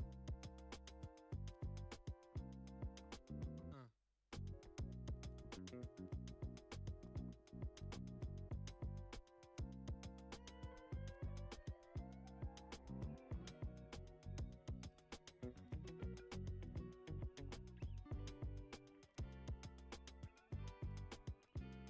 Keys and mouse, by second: 0.7-1.1 middle drag, 1.2-1.9 shift+middle drag, 1.9 Tab, 2.9 a, 2.9 s, 4.7 g, 6.9 e, 10.6 click, 11.0 middle click, 11.8 ctrl+z, 12.2 ctrl+z, 13.8 i, 17.4 click, 18.2 a, 19.0 e, 21.7 alt+shift+click.